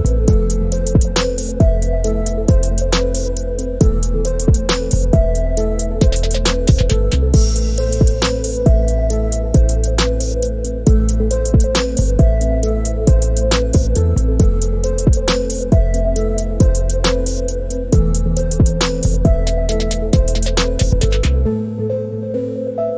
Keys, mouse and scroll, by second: 0.3 middle click, 0.5-3.8 middle drag, 6.7 middle click, 7.9 alt+click, 8.4 middle click, 8.6-9.6 drag, 10.1-11.3 middle drag, 11.8-12.2 middle drag, 12.6 alt+middle click, 13.0 alt+click, 13.3 middle click, 13.4 right click, 19.0 click, 19.7 ctrl+r, 21.6-22.6 drag.